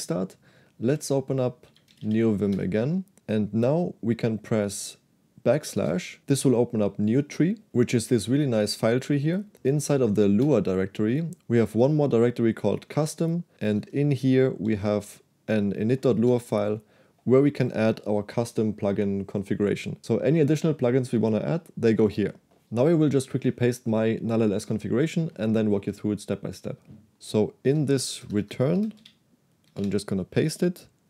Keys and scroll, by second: 1.0-2.5 typing, 2.6 Return, 5.8 \, 27.8 a, 28.3 Return, 28.4 Return, 28.9 Escape, 29.1 k, 30.0 shift+p.